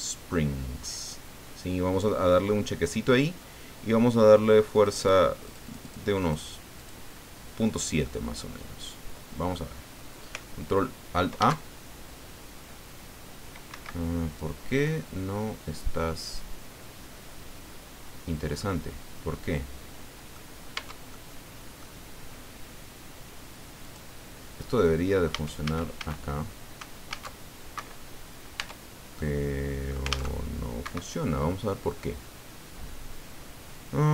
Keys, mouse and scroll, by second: 4.7 click, 5.4 click, 6.1 click, 6.7 click, 8.0-9.7 middle drag, 11.4 alt+a, 13.7 Escape, 14.2-15.8 middle drag, 15.8 click, 16.1-18.8 middle drag, 19.3-20.5 middle drag, 20.7 Tab, 21.1 middle click, 23.8 click, 24.3 scroll up 1, 25.3 a, 27.1 alt+a, 27.9 Escape, 28.6 Tab, 29.1 click, 29.6 middle click, 30.1 alt+a, 30.8 Escape.